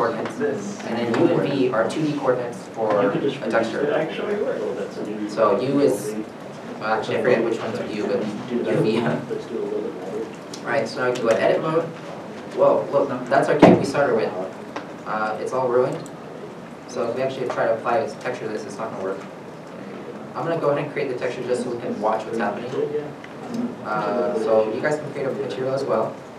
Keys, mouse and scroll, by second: 9.7 scroll up 1, 10.9 scroll up 1, 11.1 shift+middle click, 11.4 Tab, 16.2 Tab, 16.4 shift+middle click, 16.6 scroll up 1, 19.0 scroll, 19.0 Tab, 20.5 n, 21.5 shift+middle click.